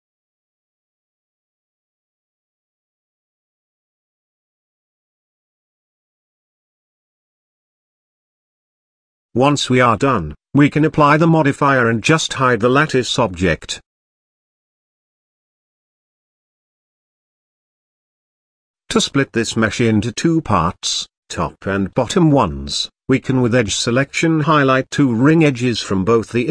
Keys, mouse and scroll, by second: 0.4 g, 4.1-4.7 scroll down 1, 4.7 click, 5.4 g, 7.1-8.7 middle drag, 8.7 Tab, 9.4 click, 10.0 click, 11.3-12.9 drag, 14.6 drag, 15.6-17.3 middle drag, 17.3 click, 17.9-18.3 shift+middle drag, 18.3-18.9 scroll up 2, 18.9 Tab, 20.4 click, 23.6 alt+click, 25.1 middle click, 25.5-26.4 scroll up 2, 26.4 alt+shift+click.